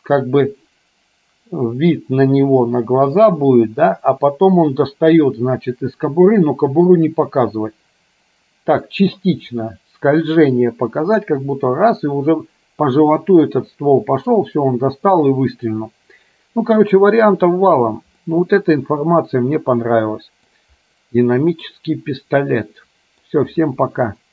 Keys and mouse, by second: 18.3-20.7 middle drag, 21.8-23.4 middle drag.